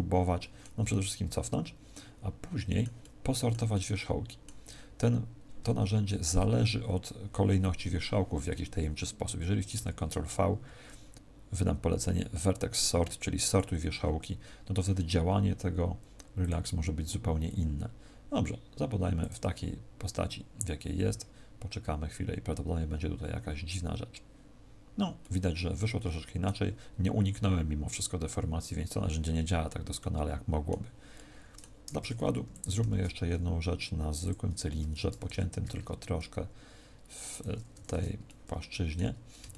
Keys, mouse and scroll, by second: 0.3 middle click, 0.8 ctrl+z, 1.8 middle click, 2.9 middle click, 5.5 ctrl+v, 9.7 ctrl+v, 16.3 click, 19.1 click, 25.1 middle click, 29.9 middle click, 31.0 middle click, 31.8 Tab, 32.3 x, 32.8 shift+a, 34.7 Tab, 35.2 ctrl+r, 37.3 click, 37.6 a, 37.8 a, 38.2 middle click, 39.1 scroll down 1, 39.4 shift+middle click.